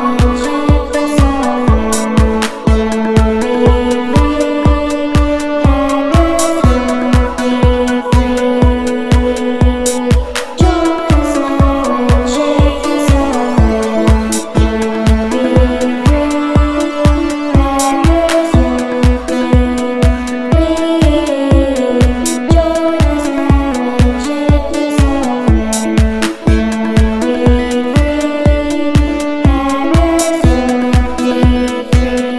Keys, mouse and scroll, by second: 2.6 ctrl+middle click, 3.6-4.9 drag, 5.5-7.8 drag, 8.8 click, 9.6 ctrl+scroll down 1, 10.4-10.8 ctrl+scroll up 1, 11.1 ctrl+middle click, 12.4 ctrl+scroll up 2, 12.9-13.7 scroll down 2, 14.1 scroll up 1, 14.6 scroll down 1, 15.7 click, 17.9 click, 19.6 click, 22.1 click, 22.6 click, 25.2-25.6 ctrl+scroll up 2, 25.9 ctrl+scroll down 1, 26.4 ctrl+scroll down 2, 27.1-27.5 ctrl+scroll up 2, 28.1 ctrl+scroll up 2, 28.9 scroll down 1, 29.6-30.0 scroll down 1, 30.4-30.8 scroll up 1, 31.1-31.6 scroll down 1, 32.0 z.